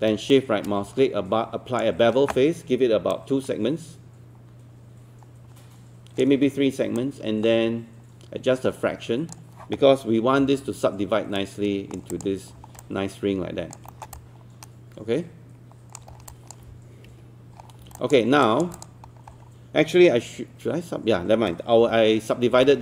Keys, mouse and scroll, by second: 0.3-2.7 shift+right drag, 3.1-9.7 drag, 10.4 3, 11.4 right click, 12.1 click, 12.6 alt+scroll down 1, 12.8 alt+click, 13.9 alt+middle click, 14.2-16.0 alt+drag, 16.2 alt+scroll down 1, 17.6 scroll down 1, 18.0 alt+click, 18.4 alt+click, 18.8 click, 19.1-21.8 scroll up 1, 21.8 q, 22.4 scroll down 1, 22.6 alt+middle click.